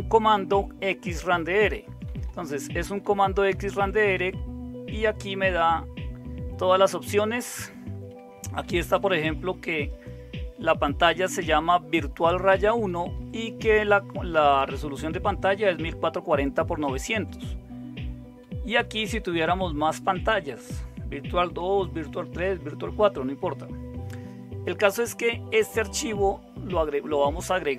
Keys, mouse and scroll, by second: 1.8 Right, 2.0 Right, 2.2 Right, 2.4 Right, 2.6 Right, 3.0 Right, 3.2 Right, 3.5 Right, 3.7 Right, 4.0 Right, 4.1-7.9 Right, 8.4 Left, 8.6 Left, 8.8 Left, 9.0 Left, 9.2-9.5 Left, 12.9 Right, 13.2 Right, 13.3 Right, 16.8 Right, 17.0 Right, 17.1 Right, 18.6 Right, 18.8 Right, 18.9 Right, 19.1 Right, 19.3 Right, 19.4 Right, 19.6 Right, 19.7 Right, 19.9 Right, 20.1 Right, 20.3 Right, 20.4 Right, 21.6 Right, 21.7 Right, 21.9 Right, 22.5 Down, 22.8 Down.